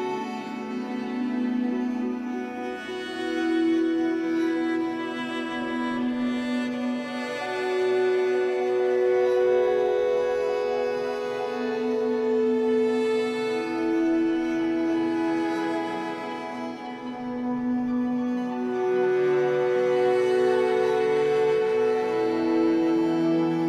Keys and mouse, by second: 3.3-7.7 drag, 7.7 space, 11.9 click, 13.0 click, 13.6 click, 16.4 click, 17.5 click, 18.3 KP_1, 18.6 KP_0, 18.7 KP_0, 18.9 KP_0, 19.1 Return, 20.6-21.9 drag, 21.1 space.